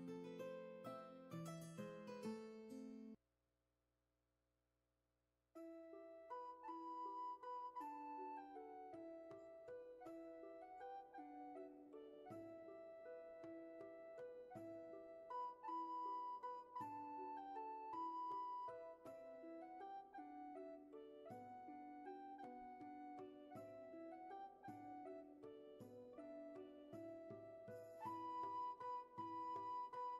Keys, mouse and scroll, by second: 2.5 ctrl+z, 10.2 ctrl+z, 20.0 ctrl+z, 25.2 ctrl+z, 27.9 ctrl+z.